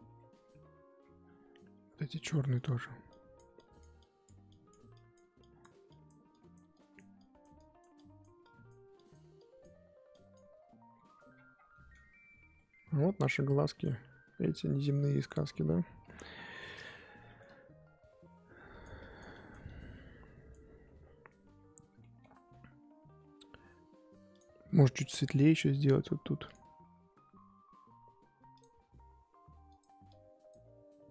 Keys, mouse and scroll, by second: 0.1-0.9 scroll down 8, 0.9-2.5 scroll up 14, 2.5-10.9 drag, 10.9-11.7 scroll down 21, 11.7 middle click, 11.9-12.5 scroll up 2, 12.5-14.0 middle drag, 14.0-14.4 scroll up 1, 14.4 middle click, 14.8-15.1 scroll up 3, 15.1 middle click, 15.3-16.0 scroll up 4, 16.0 KP_1, 16.4-17.2 scroll up 7, 17.2 shift+middle click, 17.5-17.8 scroll up 2, 17.8-18.2 scroll down 4, 18.2-18.7 scroll up 2, 18.7-21.5 drag, 21.5 scroll down 1, 22.0-24.3 shift+middle drag, 24.3-26.5 drag, 28.6 click, 29.7-31.1 drag.